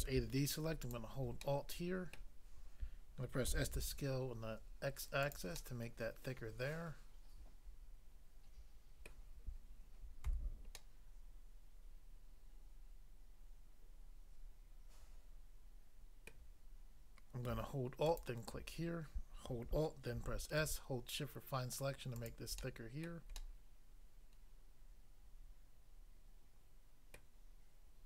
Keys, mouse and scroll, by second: 0.8 alt+click, 1.4 middle click, 2.1 middle click, 3.5 typing, 5.2 click, 5.3 click, 5.5 middle click, 9.1 middle click, 10.2 a, 10.7 middle click, 16.2 middle click, 18.0 alt+click, 20.2 alt+s, 22.1 shift+click, 22.6 middle click, 23.0 middle click, 23.4 middle click, 27.1 middle click.